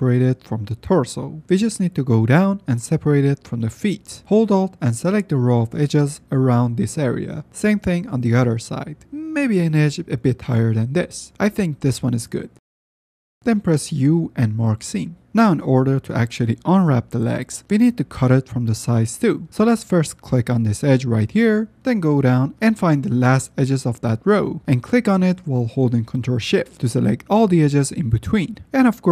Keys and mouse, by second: 0.2 F10, 1.8-2.1 shift+drag, 2.9 shift+middle drag, 4.3 middle click, 4.8 alt+F10, 5.0 alt+click, 5.8 shift+click, 6.2 middle click, 6.4 alt+click, 7.0 shift+click, 11.4 alt+click, 14.3 u, 15.5 middle click, 16.3 shift+middle click, 17.3 middle click, 17.5 shift+middle click, 17.7 shift+middle click, 22.9 shift+middle click, 23.5 middle click, 24.5 middle click, 25.7 alt+middle click, 27.2 ctrl+shift+click, 28.7 shift+middle click.